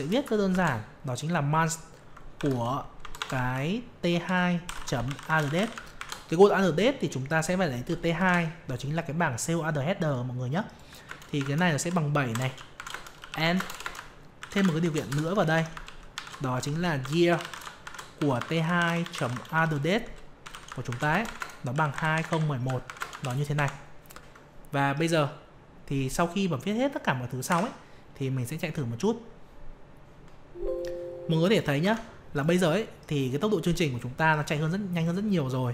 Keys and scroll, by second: 27.4 F5, 31.8 alt+Tab.